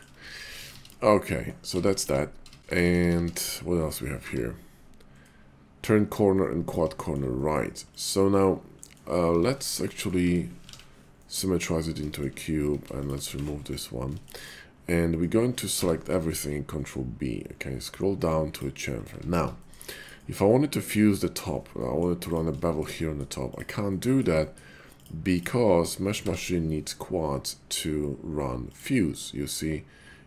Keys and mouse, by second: 0.4 ctrl+z, 0.6 ctrl+z, 0.7 ctrl+z, 1.1 click, 1.7 ctrl+z, 1.9 ctrl+z, 2.0-2.6 ctrl+z, 2.8 ctrl+z, 3.0 ctrl+z, 3.1 ctrl+z, 4.2 y, 6.3 middle click, 6.9 shift+middle click, 7.4 middle click, 7.8 click, 8.8 middle click, 9.2 Tab, 9.9 middle click, 10.2 Tab, 10.7 alt+x, 11.2 click, 12.1 shift+click, 12.6 Tab, 13.2 x, 14.1 shift+click, 15.7 a, 16.3 ctrl+b, 18.6 click, 19.1 Tab, 19.6 shift+middle click, 19.9 click, 20.4 middle click, 21.7 middle click, 22.2 click, 22.5 shift+middle click, 23.0 middle click, 23.4 click, 23.8 middle click, 24.4 shift+middle click, 25.0 shift+click, 25.3 shift+click, 26.2 y.